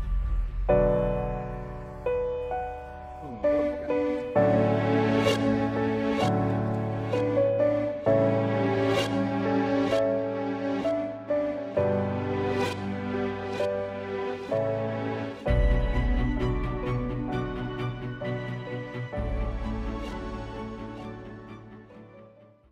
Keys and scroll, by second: 0.9 space, 2.4 super+s, 2.9 space, 6.5 space.